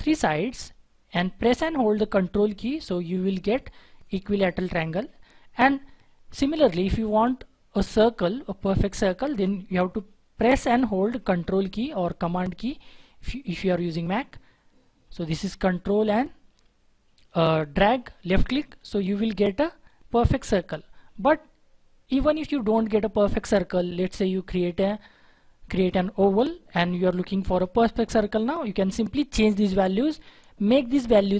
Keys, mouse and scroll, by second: 0.3 double click, 2.2 ctrl+click, 13.7 ctrl+click.